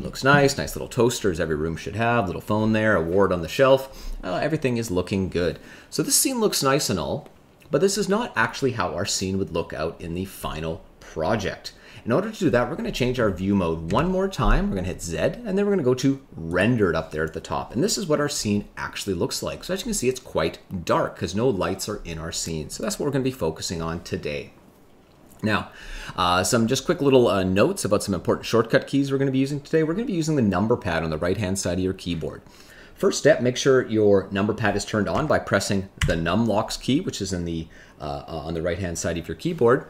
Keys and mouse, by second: 0.0 shift+middle click, 13.8 z.